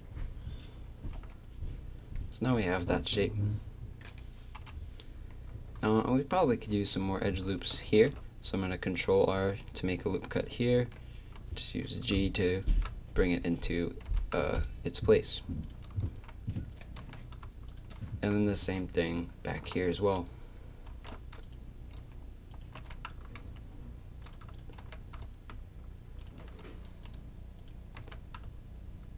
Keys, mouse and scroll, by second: 0.9 a, 1.1 z, 4.6 KP_3, 7.9 ctrl+r, 10.8 g, 13.2-15.6 drag, 14.1 g, 16.0 a, 16.7 click, 17.0 g, 18.1 a, 20.9 ctrl+r, 22.8 g, 24.5-26.2 drag, 24.8 g, 28.0 g.